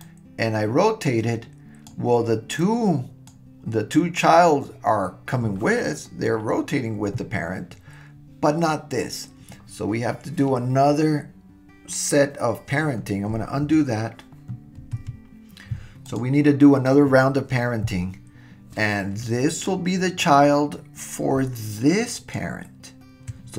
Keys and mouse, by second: 0.1-1.9 drag, 2.6-3.5 drag, 13.7 super+z, 15.0 super+z, 16.1 click, 19.5 click, 22.1 shift+click.